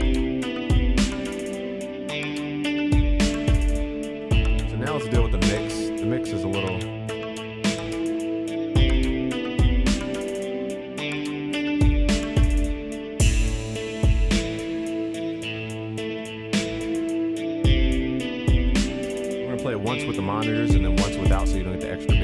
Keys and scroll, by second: 12.5 ctrl+s, 16.2 ctrl+s, 16.9 ctrl+s.